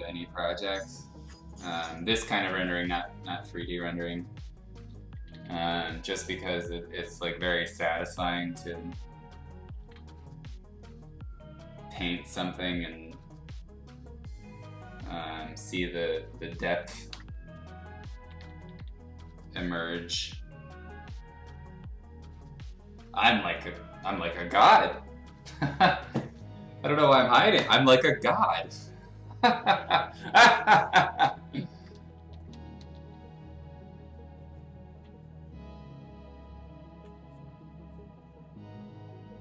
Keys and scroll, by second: 2.3 x, 5.1 [, 5.3 [, 6.2 ], 6.4 ], 9.9 x, 18.2 [, 18.4 [, 18.6 [, 18.7 [, 31.9 ], 32.1 ], 32.5 ], 32.8 ].